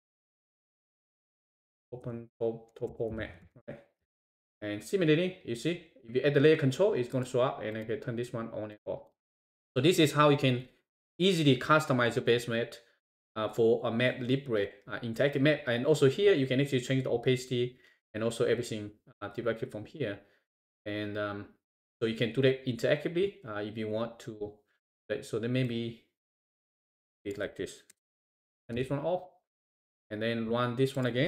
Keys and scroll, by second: 4.1 shift+Return, 28.8 shift+Return.